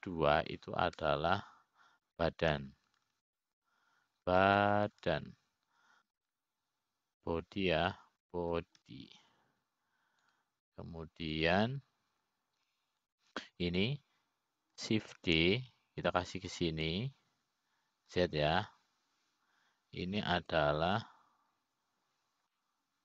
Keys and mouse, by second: 0.0 click, 2.3 F2, 7.1 BackSpace, 7.3 BackSpace, 7.6 BackSpace, 14.0 click, 15.5 click, 17.8 shift+d.